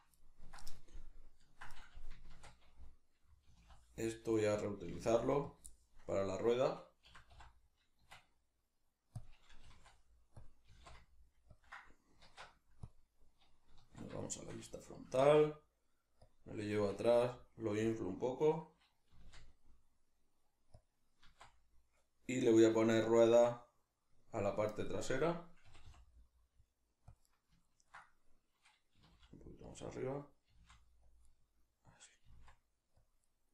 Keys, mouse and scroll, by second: 0.2-4.4 ctrl+middle drag, 2.4 shift+d, 4.4 right click, 4.9 g, 5.6 click, 5.6-9.2 shift+middle drag, 7.1 s, 9.2 click, 9.6 g, 10.4 click, 10.7 g, 11.6 ctrl+click, 12.2 alt+o, 14.2-16.3 shift+middle drag, 15.2 g, 16.3 click, 16.6 s, 17.9 click, 19.1 g, 20.8 click, 21.2 z, 23.0-27.2 shift+middle drag, 25.7 g, 27.2 click, 27.2-29.7 middle drag, 29.0 g, 29.7 click, 29.8-31.2 middle drag, 30.5 g, 31.2 click, 31.2-33.1 middle drag, 32.2 g, 33.1 click, 33.2-33.5 middle drag.